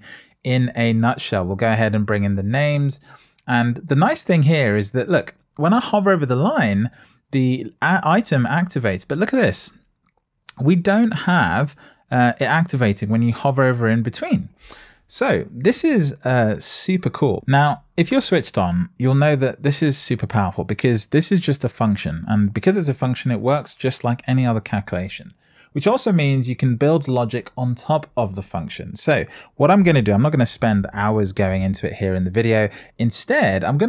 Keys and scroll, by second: 30.5 super+s.